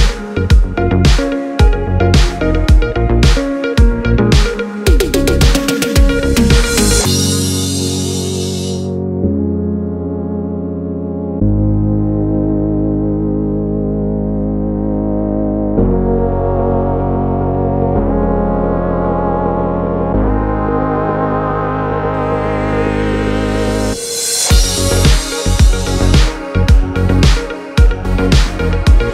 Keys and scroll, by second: 5.2 super+c, 5.6 super+v, 18.5 super+c, 18.8 super+v, 22.6 super+c, 22.9 super+v, 26.0 F9.